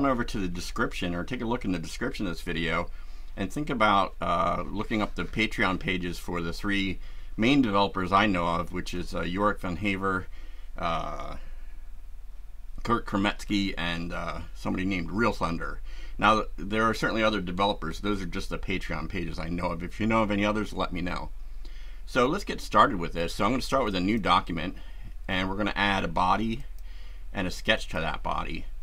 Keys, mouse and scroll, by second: 23.8 click, 26.6 click, 27.8 click.